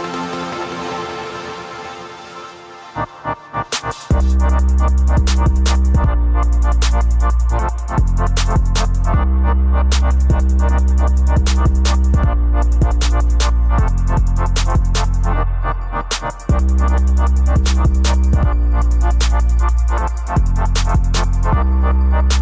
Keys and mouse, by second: 0.6 KP_2, 0.9 KP_9, 2.0 Return, 3.4 click, 4.1-5.2 typing, 6.5 KP_2, 7.1 KP_4, 7.6 KP_6, 7.9 KP_6, 9.5 right click, 13.4 click, 14.4 click, 15.5 click, 16.6 click, 18.1 click, 19.0 click, 19.9 click, 22.1-22.4 right drag.